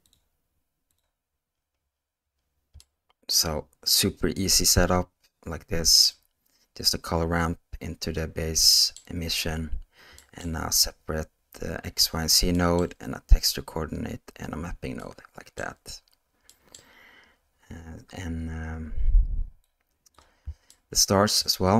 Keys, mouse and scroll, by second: 0.0-1.0 drag, 4.3-6.4 middle drag, 15.0-16.0 middle drag, 16.7-17.1 middle drag, 19.6 click, 20.7-21.4 shift+middle drag.